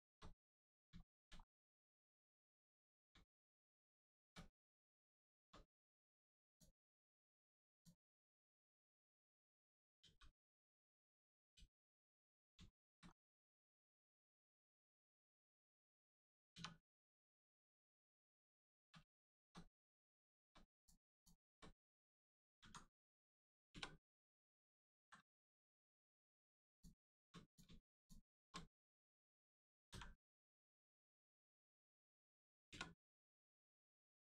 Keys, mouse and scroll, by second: 0.3 middle click, 0.4 middle click, 1.0 shift+middle click, 1.4 scroll up 1, 2.2 scroll down 1, 2.8 middle click, 3.2 shift+middle click, 4.4 scroll down 1, 5.1 shift+middle click, 6.4 click, 6.5 click, 8.5 k, 9.3 click, 10.0 k, 10.8 click, 11.5 k, 12.7 shift+middle click, 13.0 scroll up 1, 13.7 shift+middle click, 14.0 scroll up 1, 14.5 shift+middle click, 15.3 click, 16.0 scroll up 1, 16.5 2, 17.0 click, 18.3 shift+click, 19.2 shift+middle click, 19.8 middle click, 20.8 click, 21.1 shift+click, 22.6 v, 24.9 z, 25.4 click, 26.7 shift+click, 27.4 click, 27.9 shift+click, 29.8 click, 31.5-32.6 scroll down 1, 32.6 Return.